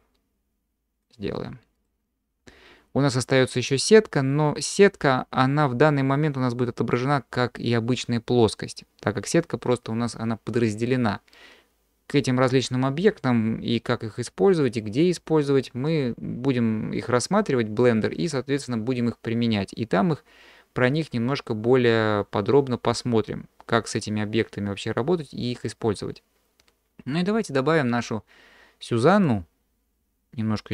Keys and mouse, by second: 2.4 q, 30.1-30.4 middle drag.